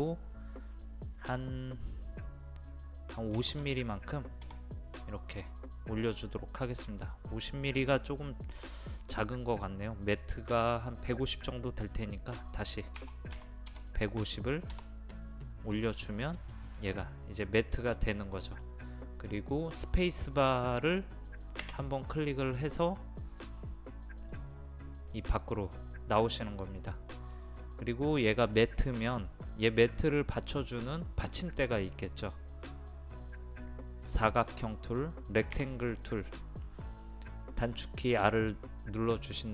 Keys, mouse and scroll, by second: 3.4 KP_5, 3.5 KP_0, 13.0 KP_1, 13.4 KP_5, 13.7 KP_0, 16.0-19.2 middle drag, 22.2 space, 24.3 click, 25.1-28.3 middle drag, 32.2-35.5 scroll up 1, 35.6 r.